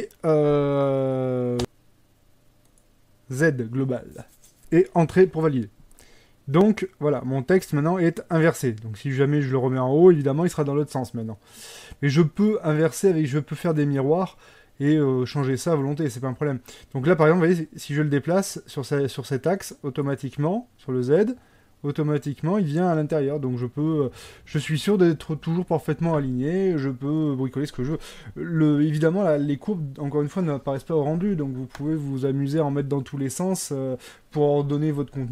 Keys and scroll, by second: 5.2 Return.